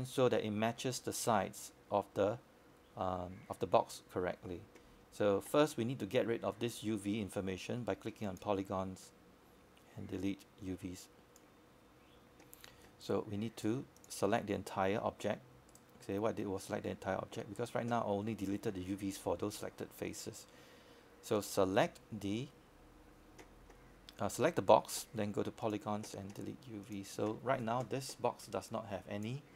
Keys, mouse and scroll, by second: 11.5-11.9 scroll down 1, 11.9 scroll up 1, 20.5-21.1 scroll down 1, 23.8-27.8 drag, 28.6 right click.